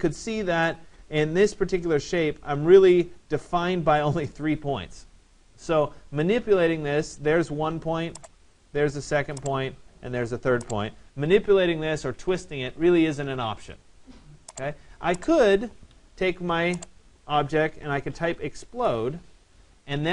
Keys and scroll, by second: 15.5 Escape.